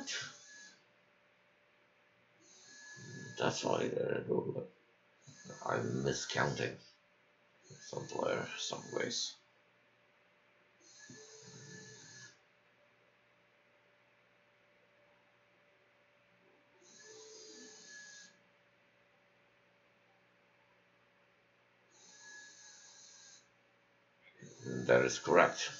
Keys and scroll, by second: 16.9 ', 17.0 BackSpace.